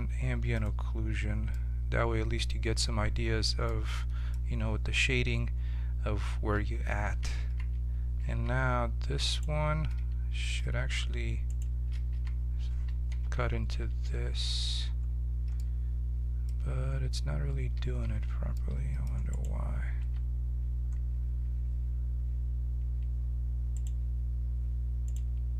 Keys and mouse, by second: 0.6-3.6 drag, 3.8-5.0 middle drag, 5.0 click, 7.3 ctrl+z, 8.3 ctrl+z, 9.2-10.4 drag, 10.5 z, 12.1 z, 13.1 ctrl+KP_Subtract, 17.7 ctrl+z, 19.3 click, 19.9 z, 23.7-25.5 right drag.